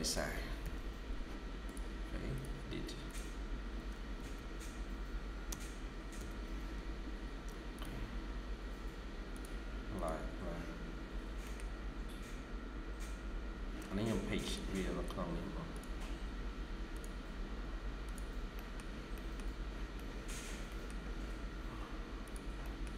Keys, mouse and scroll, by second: 0.0-0.5 typing, 3.6-6.0 typing, 11.2 scroll up 1, 11.3 middle click, 12.7-13.0 scroll up 1, 14.8 scroll up 1, 18.4 middle click, 19.5 scroll down 1, 19.8 middle click, 21.0 scroll down 1, 21.1 scroll up 1, 22.5 middle click, 22.8 typing.